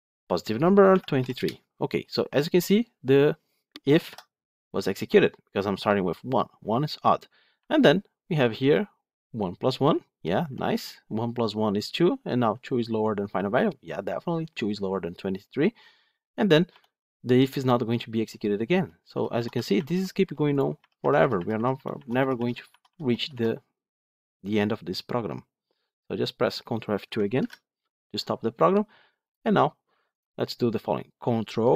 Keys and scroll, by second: 4.0 F8, 18.7 F8, 27.4 ctrl+F2.